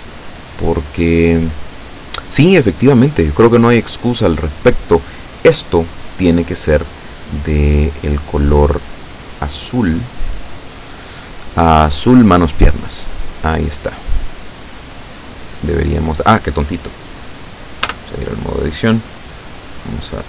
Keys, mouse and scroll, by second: 4.3 click, 5.4 right click, 8.0 click, 9.7 click, 12.3 click, 17.9 Tab.